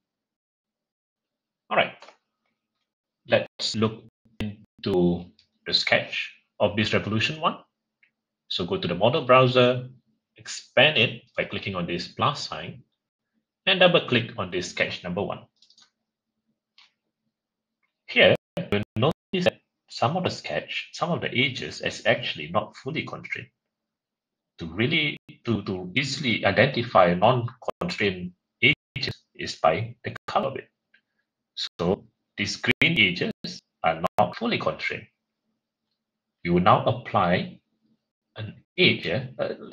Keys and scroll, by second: 2.6 shift+F6.